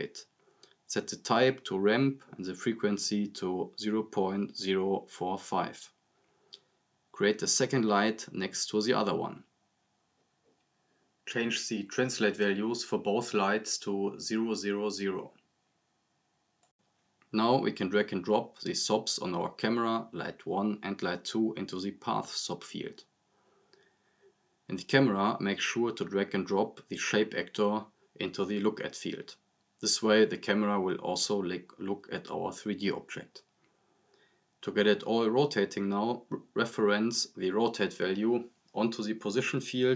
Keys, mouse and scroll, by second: 6.8 scroll down 1, 7.3 click, 8.1 scroll down 1, 8.4 click, 14.7 click, 18.5-20.0 drag, 24.3 scroll up 1, 24.7-25.4 click, 25.8 click, 26.3 scroll down 1, 26.6-29.9 drag, 32.8 scroll up 1, 33.2-33.8 click, 34.1 scroll up 1, 35.2-37.3 drag.